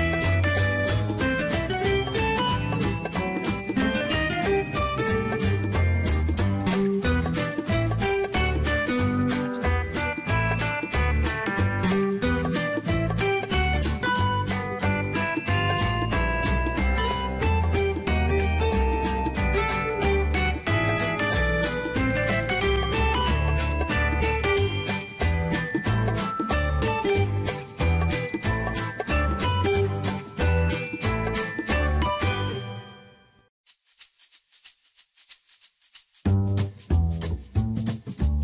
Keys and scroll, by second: 14.0 ctrl+c, 20.0 ctrl+c, 30.8 ctrl+v.